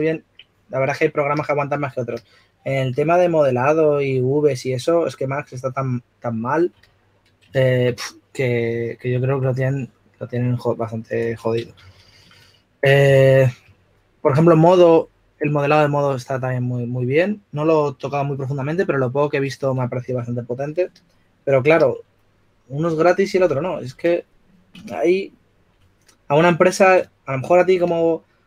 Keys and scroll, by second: 1.9 s, 3.6 2, 13.4 typing, 21.8 s, 24.0 typing.